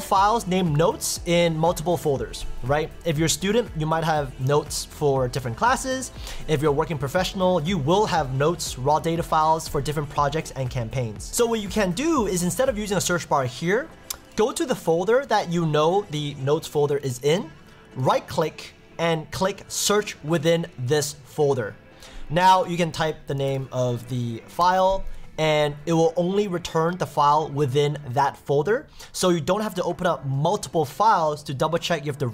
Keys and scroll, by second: 24.6 Return.